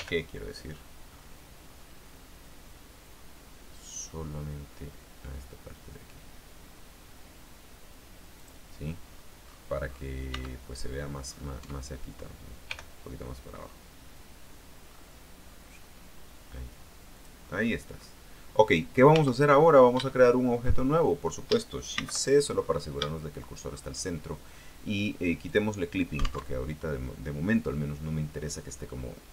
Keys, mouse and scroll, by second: 0.1 g, 0.8-2.4 scroll up 2, 2.8-3.7 scroll up 2, 8.5 click, 9.1-9.5 scroll down 1, 9.6-10.0 scroll up 1, 10.4 Tab, 11.0-11.8 scroll down 2, 11.8 Tab, 12.8 g, 15.0-15.4 scroll up 2, 15.6-16.1 scroll up 2, 17.3 click, 17.6-18.4 scroll down 2, 19.3 Tab, 19.6-20.1 scroll up 2, 20.2 shift+middle click, 20.8-21.3 shift+scroll down 2, 22.1 shift+c, 23.8-24.3 shift+scroll up 3, 25.6 click, 26.6 alt+Tab.